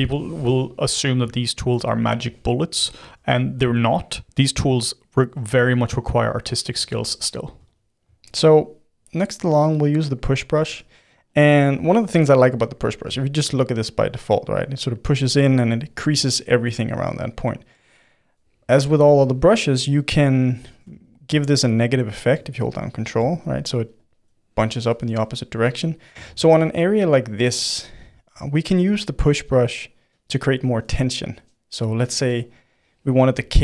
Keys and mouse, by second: 0.2-1.3 drag, 1.3-3.1 ctrl+middle drag, 3.1 f, 4.0-6.9 middle drag, 6.9 f, 7.7-9.8 shift+drag, 9.8 middle click, 10.6 f, 11.7-13.9 middle drag, 13.9-15.7 drag, 15.7-20.9 middle drag, 20.9 ctrl+z, 21.5-23.3 ctrl+drag, 23.3-26.2 middle drag, 26.2 ctrl+z, 26.6-33.6 middle drag.